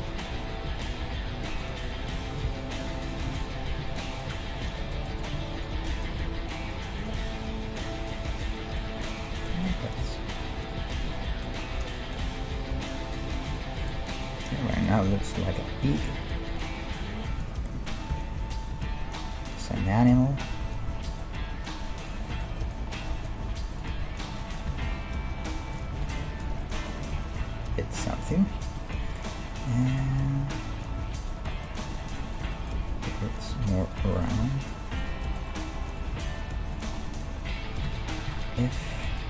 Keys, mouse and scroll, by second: 0.2 middle click, 1.1 e, 2.5 ctrl+Tab, 3.1 click, 3.5 right click, 3.8 f, 4.3 ctrl+Tab, 5.1 click, 6.1 g, 7.2-9.1 middle drag, 9.1 right click, 9.3 g, 9.9 middle click, 10.3-12.4 drag, 10.8 g, 12.4-16.7 middle drag, 12.7 KP_1, 15.8 click, 16.5-18.3 right drag, 16.9 g, 18.1 o, 18.7 g, 22.0 right click, 22.3-26.2 middle drag, 23.1-28.2 right drag, 24.7 g, 26.6-30.1 middle drag, 27.0 g, 28.8-30.1 right drag, 30.1 g, 31.1-37.5 middle drag, 32.0-35.4 drag, 32.8 g, 34.3 g, 37.5 right click, 37.9 f, 38.0 middle click, 38.3 ctrl+Tab, 38.8 middle click.